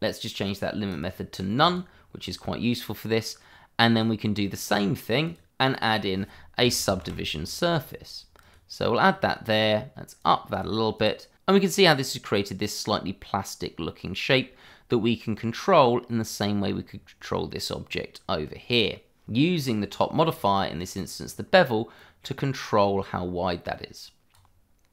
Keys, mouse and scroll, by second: 0.9 click, 3.1 middle click, 5.2 click, 5.6 click, 6.6 s, 6.8 u, 7.0 b, 8.4 click, 10.6 double click, 11.5 middle click, 12.7 click, 16.5-18.9 scroll down 1, 21.2-21.9 scroll up 1, 22.0 click, 24.8-24.9 scroll up 1.